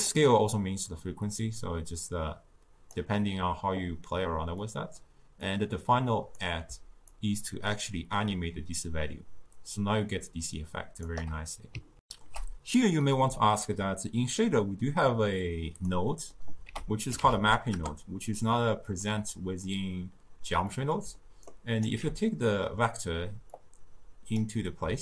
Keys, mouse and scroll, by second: 12.1 ctrl+alt+shift+q, 15.4 click, 16.2 middle click, 16.7 ctrl+a, 17.5 p, 19.3-21.5 middle drag, 21.5-22.6 alt+right drag, 22.6-23.7 middle drag, 23.7-25.0 drag.